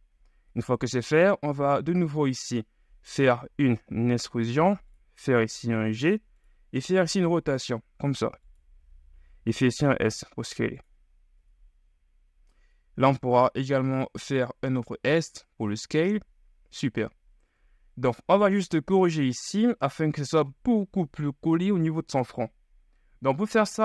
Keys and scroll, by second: 0.7 KP_3, 3.9 e, 5.3 g, 6.9 r, 9.6 s, 11.5 KP_1, 13.1 s, 17.6 KP_3, 18.3 shift+KP_3.